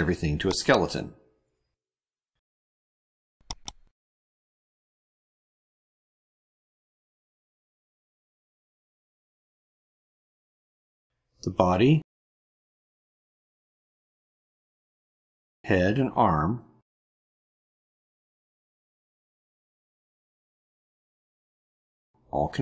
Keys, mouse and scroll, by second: 0.4 right click, 3.3 click, 4.4 click, 4.9 click, 5.4 right click, 5.6 click, 6.2 ctrl+scroll up 2, 6.4 middle click, 6.9 click, 7.3 right click, 7.5 click, 7.7 click, 8.1 click, 8.5 right click, 8.6 click, 8.8 click, 9.0 click, 9.5 click, 9.6 right click, 9.8 click, 9.9 click, 10.2 click, 11.3 click, 11.6 ctrl+scroll up 1, 12.0 ctrl+click, 12.5 ctrl+click, 12.9 right click, 13.3 click, 13.7 middle click, 14.7 ctrl+click, 15.3 click, 15.6 right click, 16.1 click, 16.5 click, 16.9 ctrl+click, 17.3 ctrl+click, 18.1 click, 18.4 click, 18.7 ctrl+click, 19.0 ctrl+click, 19.5 right click, 20.0 click, 20.7 click, 21.1 ctrl+click, 21.4 ctrl+click, 21.8 right click, 22.3 click.